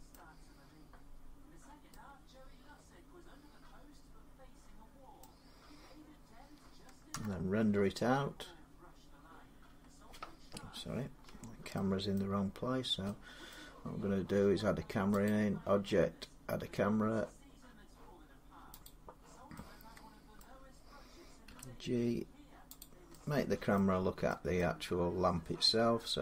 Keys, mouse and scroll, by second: 0.3 scroll down 2, 1.4 scroll up 1, 4.9 scroll down 2, 5.0 middle click, 6.9 F12, 9.4 scroll down 2, 11.0 Escape, 11.9 middle click, 12.1-12.8 scroll down 8, 13.3 middle click, 15.0 click, 15.7 scroll, 18.7 click, 20.2 middle click, 21.3 g, 22.6 click, 23.6 middle click, 24.4 middle click, 25.5-26.2 scroll.